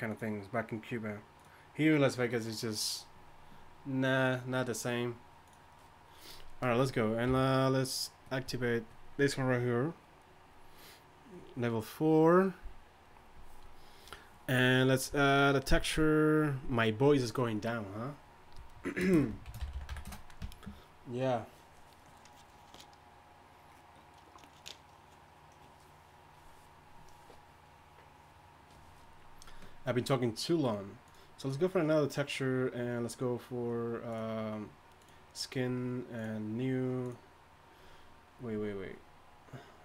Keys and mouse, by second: 7.3 t.